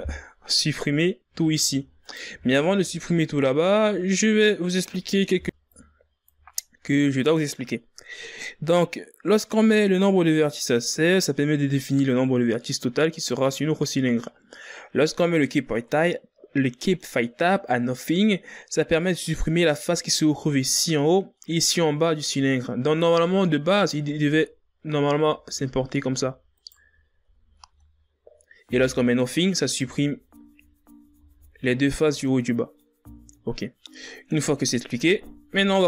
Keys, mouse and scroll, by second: 2.1 b, 3.1 z, 3.3 scroll down 3, 3.5 scroll up 1, 3.6-4.9 middle drag, 4.9-5.6 ctrl+scroll down 4, 5.6 right click, 6.1 l, 7.1 click, 7.9 ctrl+scroll down 6, 8.4-11.1 middle drag, 11.1 scroll up 2, 12.6-18.1 middle drag, 22.7-25.1 middle drag, 25.1 alt+right click, 26.6 f, 27.0 middle click, 27.9 alt+right click, 28.6 f, 28.9 scroll down 2, 29.1-31.2 middle drag, 31.2 ctrl+z, 31.7 ctrl+z, 32.5 ctrl+z, 33.4-35.8 middle drag.